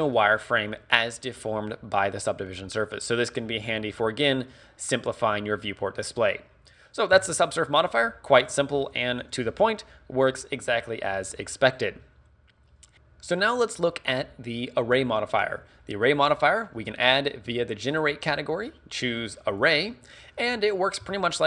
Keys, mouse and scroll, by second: 12.9 middle click.